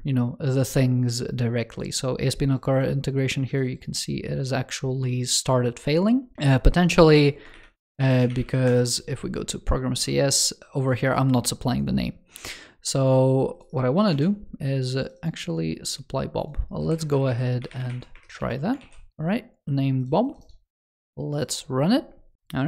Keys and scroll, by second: 7.4 shift+super+n, 13.9 super+c, 18.2 super+v, 19.2 super+s.